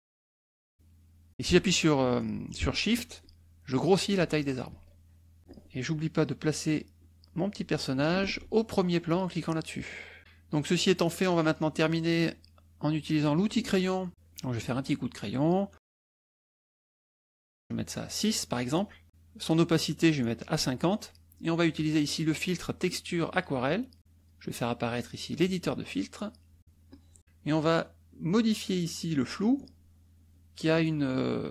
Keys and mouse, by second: 0.3 click, 3.1 shift+click, 4.1 shift+click, 4.7 shift+click, 6.1 click, 6.9-8.0 drag, 8.3 ctrl+z, 9.5 click, 10.1 click, 10.7 click, 13.2 click, 14.1 click, 14.6 click, 17.1-18.3 right drag, 19.2-20.5 right drag, 21.7 click, 23.4 click, 24.2 click, 25.4 click, 26.9 click.